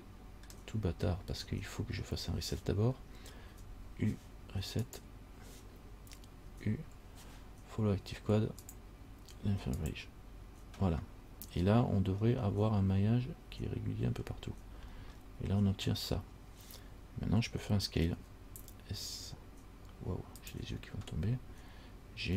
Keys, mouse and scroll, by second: 3.7 u, 6.7 u, 12.5-13.3 scroll up 2, 13.3 scroll up 2, 14.3-15.8 scroll down 10, 18.4 s.